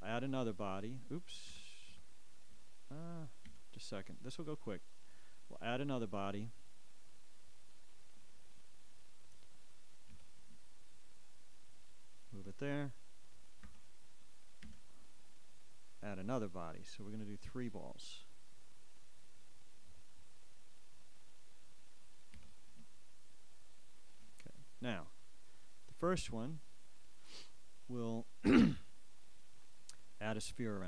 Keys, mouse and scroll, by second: 4.2 Escape, 4.3-7.9 ctrl+drag, 6.2 a, 12.3 g, 16.7 Escape, 16.8 a, 18.6 ctrl+click, 25.2 ctrl+g.